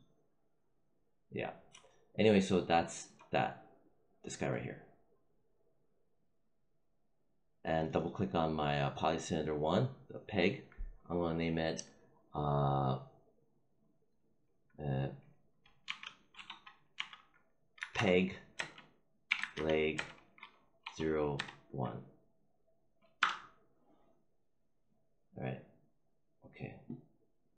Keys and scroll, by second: 15.7-20.7 typing, 23.1 Return.